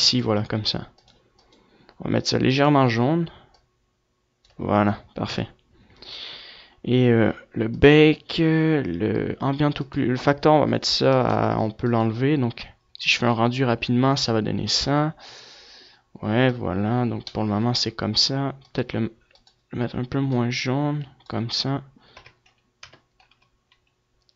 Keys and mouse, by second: 4.4 KP_0, 6.8-12.2 drag, 15.7 F11, 17.8-22.0 drag, 22.0 KP_0.